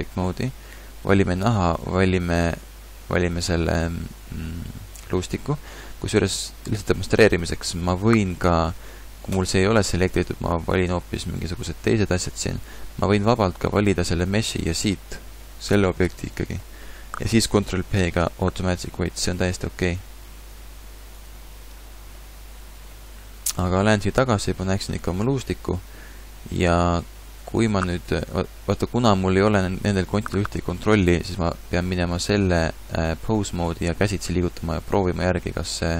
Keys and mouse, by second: 6.2 a, 17.5 ctrl+p, 32.3 ctrl+Tab, 34.3 r.